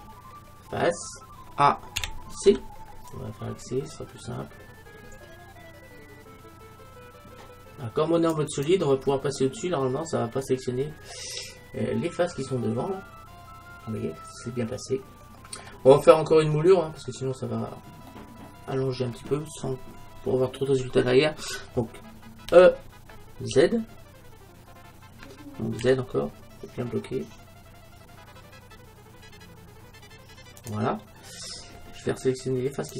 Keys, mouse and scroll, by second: 2.0 a, 2.6 c, 9.1-11.2 middle drag, 11.2-11.7 scroll up 1, 12.5-13.6 scroll down 1, 13.6-13.9 scroll down 1, 14.0 middle click, 14.3 middle click, 14.4 middle click, 14.6 middle click, 16.0-16.8 scroll down 1, 16.8 middle click, 17.5-18.2 scroll up 1, 18.2-20.0 middle drag, 22.5 e, 30.7-32.5 drag, 31.5 middle click, 32.8-32.9 right drag.